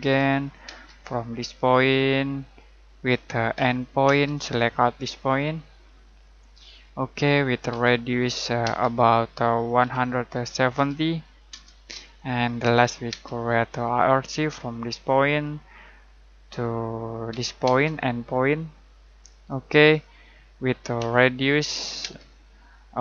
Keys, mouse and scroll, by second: 0.0-0.6 typing, 2.3 click, 3.5 e, 4.0 space, 6.0 click, 7.7 r, 9.5-11.2 typing, 11.5 Return, 13.0 space, 15.3 click, 17.2 e, 17.6 space, 19.2 click, 20.9 r, 22.0 space.